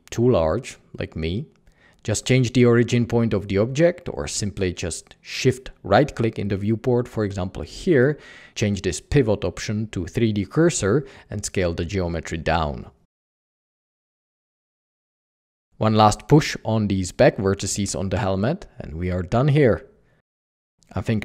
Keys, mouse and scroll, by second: 1.5 typing, 2.9 typing, 4.8 Tab, 8.9 Tab, 9.1 Escape, 11.3 Escape, 11.4 s, 13.3-14.8 typing, 14.6 Tab, 16.2 typing, 18.8-20.3 typing, 19.0 Escape, 19.9 Escape.